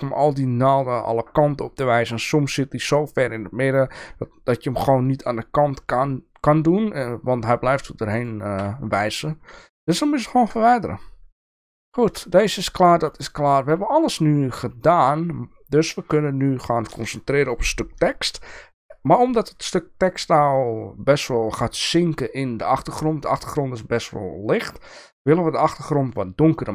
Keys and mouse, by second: 7.3 middle click, 10.3 KP_0, 11.8 middle drag, 13.1 shift+middle click, 13.9 click, 15.0 shift+middle click.